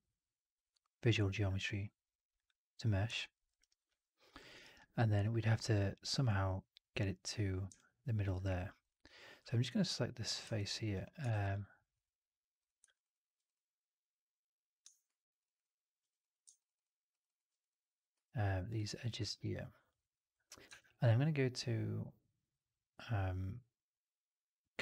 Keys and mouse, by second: 3.0 alt+click, 3.2 alt+middle click, 3.4 alt+right click, 3.6 alt+right drag, 3.8 alt+click, 4.4 alt+middle click, 4.5 alt+right drag, 4.6 alt+click, 7.6-8.1 alt+drag, 8.7 click, 9.3 3, 10.4 alt+click, 11.2 shift+x, 11.4 alt+click, 12.5 click, 12.9 shift+click, 13.3 click, 16.0 click, 16.5 ctrl+shift+click, 17.5 click, 18.4 click, 18.6 click, 19.1 alt+click, 19.9 alt+right click, 20.6 shift+Tab.